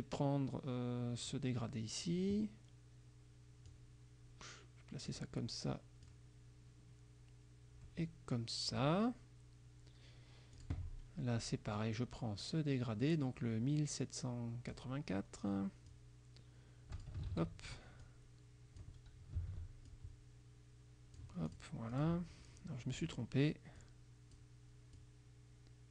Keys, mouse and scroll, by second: 3.8-5.3 drag, 6.1-9.0 drag, 10.6 click, 11.8-15.0 drag, 16.0-17.3 drag, 17.3 ctrl+z, 18.1 click, 19.5 ctrl+s, 19.9-21.4 ctrl+drag, 21.5 click, 22.0 click, 23.0 click, 23.9 click, 25.0-25.9 drag.